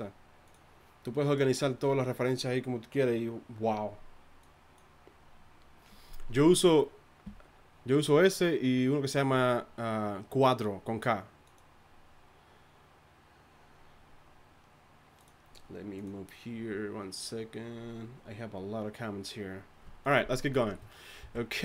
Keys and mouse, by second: 21.2 z.